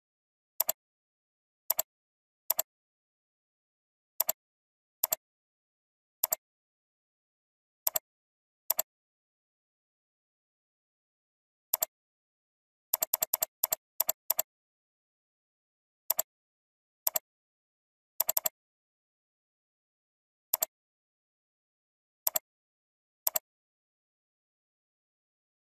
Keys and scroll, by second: 9.4 ctrl+alt+z, 12.5 alt+space.